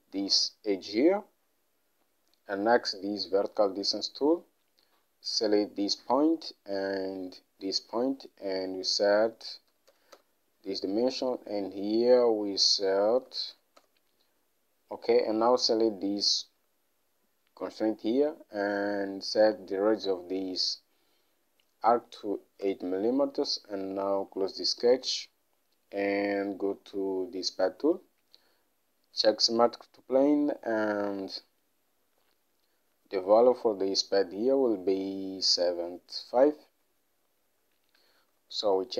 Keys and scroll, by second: 9.8 3, 10.0 0, 10.3 Return, 13.4 3, 13.6 5, 13.9 Return, 22.5 8, 22.8 Return, 38.4 7, 38.6 5.